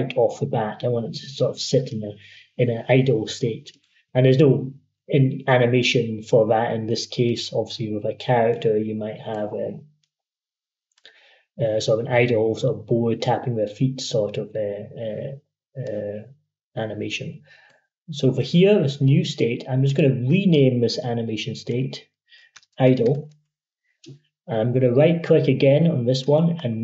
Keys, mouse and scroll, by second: 3.5 shift+click, 4.2-15.7 drag, 15.7-19.7 drag, 22.1-23.4 typing, 26.0 right click.